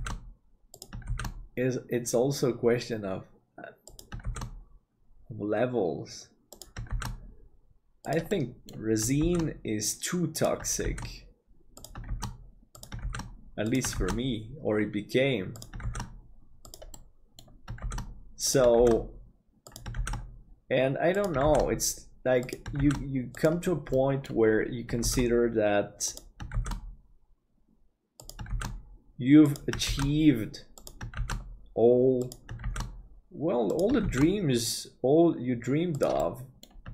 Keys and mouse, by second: 1.4 shift+d, 4.3 shift+d, 8.4 middle click, 17.0 middle click, 24.1 middle click, 36.3 middle click.